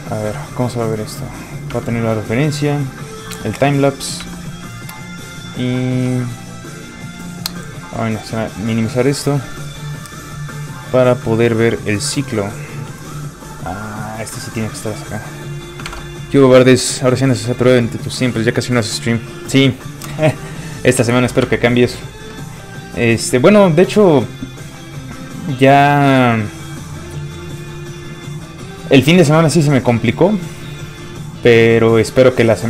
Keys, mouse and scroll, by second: 1.3 alt+click, 1.7 alt+Tab, 2.9 alt+click, 3.9 alt+click, 4.2 alt+Tab, 5.4 alt+click, 7.9 click, 15.9 alt+Tab.